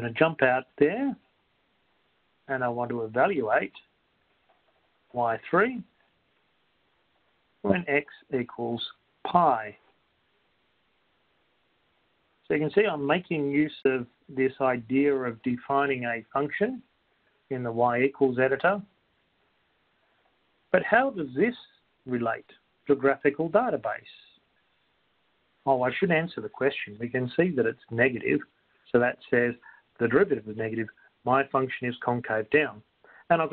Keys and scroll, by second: 6.1 3, 8.8 (, 12.3 ^, 13.1 ), 14.3 Return.